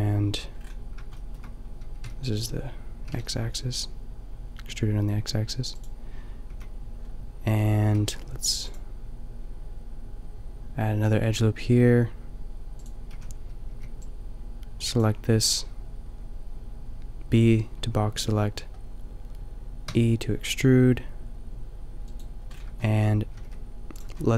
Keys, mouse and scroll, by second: 2.0 b, 3.1 g, 5.8-7.7 drag, 6.5 a, 8.0 ctrl+r, 12.9-16.3 drag, 13.2 a, 13.8 b, 19.9 e, 22.2-24.3 drag, 23.4 g.